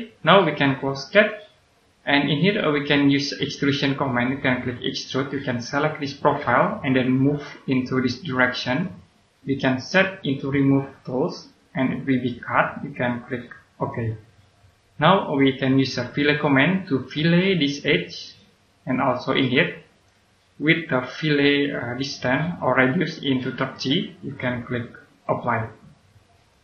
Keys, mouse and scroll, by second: 1.0 click, 2.5 right click, 4.9 click, 13.7 click, 14.7-16.2 scroll up 1, 16.2 click, 16.9 scroll up 1, 18.2 click, 20.8 scroll down 1, 25.2 click, 25.9-26.6 scroll down 1.